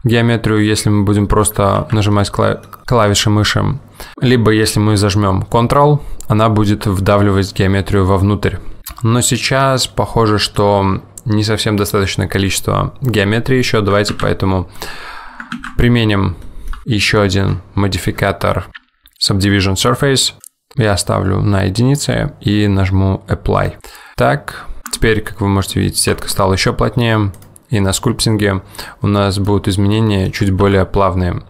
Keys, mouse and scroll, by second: 18.7 click, 19.3 click, 23.7 click, 25.0 Tab, 26.2 Tab.